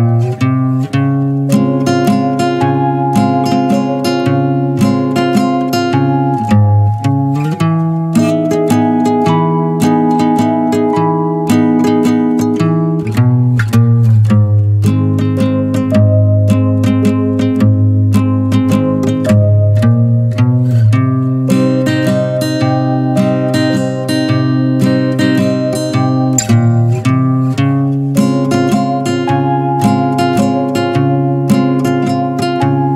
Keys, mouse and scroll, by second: 0.4 ctrl+z, 0.6-1.1 scroll up 1, 1.1-2.5 middle drag, 4.1 middle click, 4.7 w, 5.6 middle click, 6.0 e, 7.0 scroll down 3, 7.3-8.5 middle drag, 8.5 scroll up 2, 8.7-10.7 shift+middle drag, 10.7 click, 11.2 click, 12.4-13.6 middle drag, 15.6 middle click, 17.6 middle click, 18.4 e, 19.7 click, 20.1 middle click, 20.9 Tab, 21.4 Tab, 21.7 middle click, 22.0 click, 22.5-22.9 scroll up 2, 22.9-23.3 middle drag, 23.3 3, 23.4 click, 23.8 middle click, 24.7 ctrl+b, 26.7 Tab, 26.8 drag, 27.0 scroll down 3, 27.2-30.0 middle drag, 30.0 Tab, 30.2 click, 30.5-31.2 middle drag, 31.2 click, 31.6 scroll up 2, 32.1-32.4 middle drag, 32.4 scroll up 1, 32.7 shift+middle click.